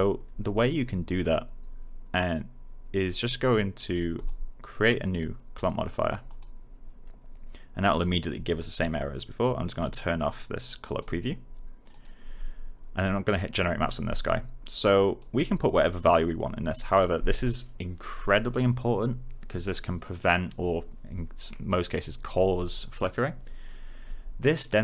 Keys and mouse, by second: 4.1 click, 9.6 click.